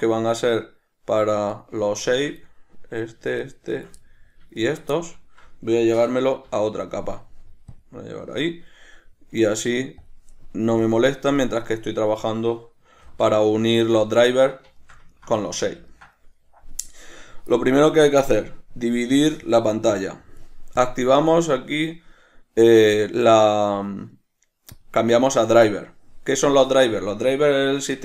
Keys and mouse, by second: 1.6 shift+right drag, 2.2 shift+right drag, 2.6-3.6 middle drag, 3.6 shift+right drag, 4.2-4.8 middle drag, 4.8 shift+right drag, 5.1-10.2 middle drag, 10.2 drag, 11.0 click, 11.6 shift+middle click, 13.2 alt+q, 13.8 shift+middle click, 14.9 shift+middle click, 16.0-18.9 ctrl+middle drag, 18.9-28.0 drag.